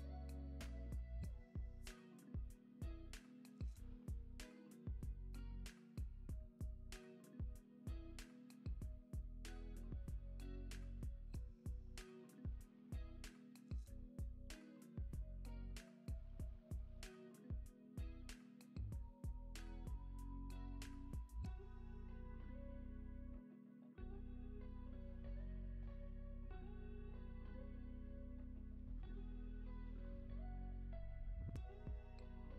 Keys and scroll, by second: 6.7 alt+q, 9.0 space, 15.1 space, 15.5 super+s, 22.2 space, 26.3 space, 26.6 super+s.